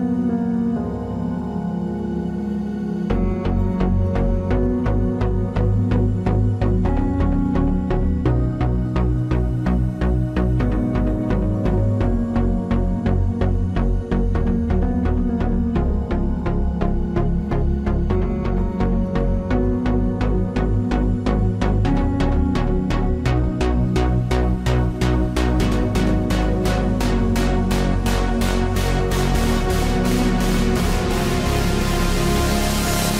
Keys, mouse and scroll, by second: 0.2 ctrl+Tab, 5.3 b, 5.6 g, 7.1 b, 7.5 g, 9.0 b, 9.4 g, 10.2 b, 11.5 g, 13.5 KP_Decimal, 15.3 b, 15.6 g, 16.7 right click, 18.0 right click, 18.1 b, 19.0 g, 20.1 b, 21.0 g, 21.6 right click, 22.5-23.6 right drag, 22.7 b, 23.1 g, 26.2 ctrl+Tab, 27.1-29.5 drag, 29.5 e, 31.3 ctrl+Tab, 32.7 middle click.